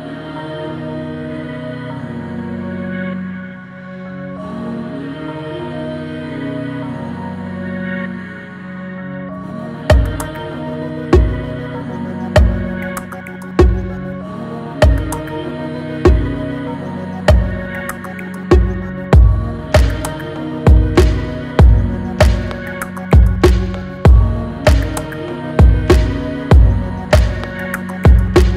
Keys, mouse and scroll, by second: 0.0 click, 0.1 click, 2.8 click, 5.9 click, 9.3 click, 22.3 click.